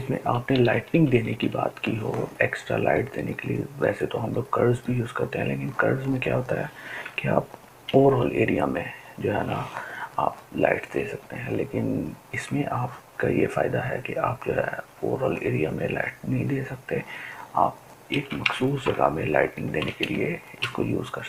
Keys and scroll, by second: 0.7 [, 0.9 [, 1.1 [, 7.5 ctrl+m.